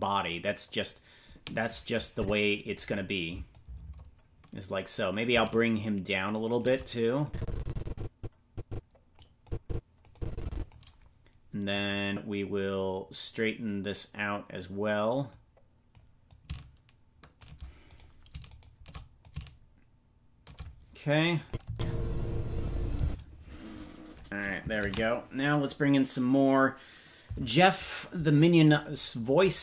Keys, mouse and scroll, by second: 2.1 click, 3.5-6.6 drag, 7.2-9.1 drag, 9.4 click, 10.1 click, 11.8 right click, 15.3 click, 16.3-17.5 drag, 18.0 right click, 18.6 shift+right click, 19.2-20.5 drag, 21.4 click, 21.6 space, 23.0 space, 27.1 ctrl+s.